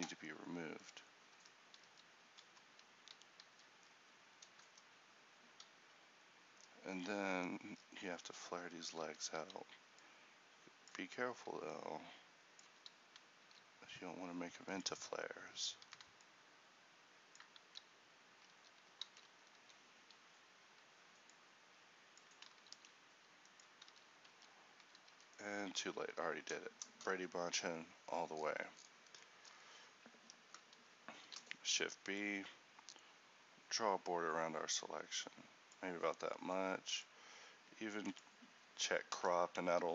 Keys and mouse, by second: 1.2 click, 1.5 Tab, 1.9-3.6 drag, 1.9 z, 3.6 a, 4.7-5.9 drag, 8.1 Tab, 9.2 z, 9.5 a, 13.6 alt+s, 15.9 a, 17.7 s, 19.2 alt+s, 22.4 click, 22.8 alt+s, 24.0 z, 24.4 Tab, 25.2 a.